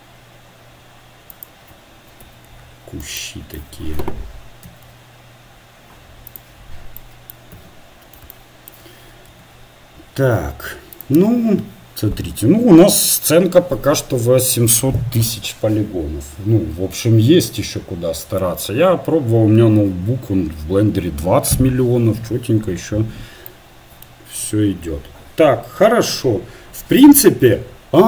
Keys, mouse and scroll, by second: 2.8 KP_3, 4.7 shift+d, 8.0 KP_7, 9.4 r, 28.0 middle click.